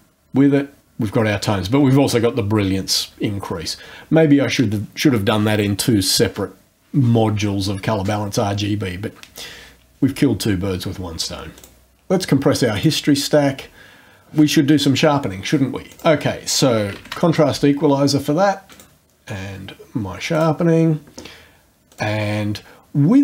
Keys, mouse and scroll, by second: 11.5 click, 12.7 click, 15.9 click, 16.9 e, 17.0 q, 18.7 click, 20.3 click, 21.9 click.